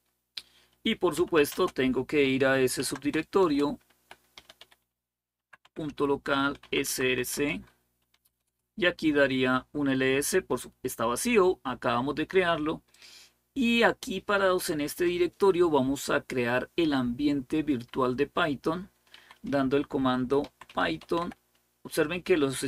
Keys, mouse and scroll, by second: 0.7-6.7 typing, 5.4 Tab, 6.7 Tab, 7.1 Return, 7.7-8.4 typing, 19.0 typing, 20.0-21.5 typing.